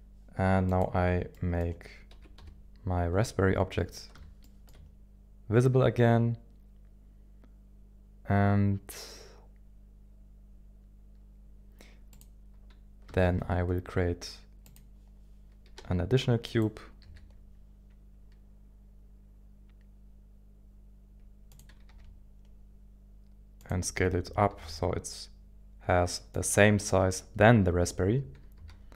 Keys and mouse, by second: 0.7 click, 1.3-1.8 middle drag, 2.1 KP_1, 2.4 KP_7, 4.4 shift+middle click, 12.2 click, 13.2 shift+a, 15.8 g, 16.5 click, 17.0 g, 17.7 s, 21.5 click, 21.9 g, 23.6 click, 24.0 g, 24.2 s, 24.2 y, 24.6 x, 26.3 click, 27.8 g, 28.2 y, 28.6 x.